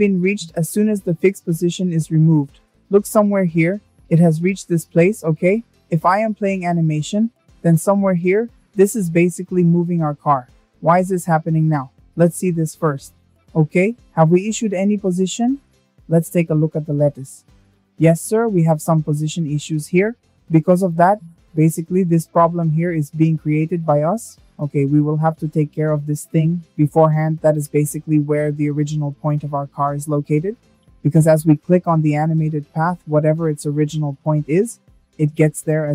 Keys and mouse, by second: 1.3 drag, 4.3 space, 8.2 space, 15.7-16.3 middle drag, 20.2 shift+middle drag, 32.3 middle click.